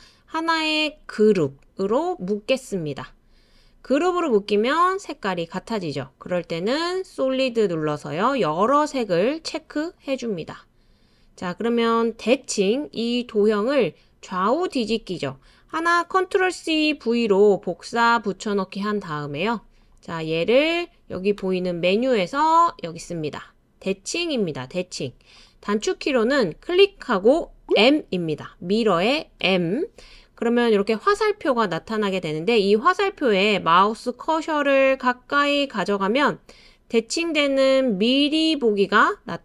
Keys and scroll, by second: 16.4 super+c, 16.9 super+v, 29.4 m.